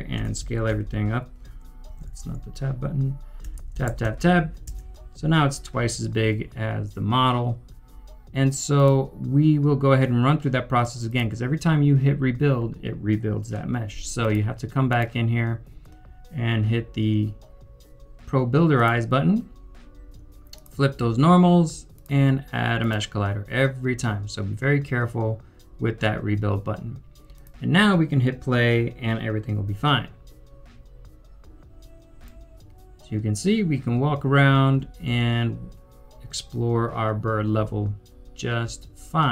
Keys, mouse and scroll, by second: 0.1 click, 0.2-0.7 typing, 2.1 typing, 3.1-4.0 typing, 3.5 Tab, 4.7 Return, 32.2-33.3 typing, 32.2 right click, 35.5-36.3 typing, 38.7-39.3 typing.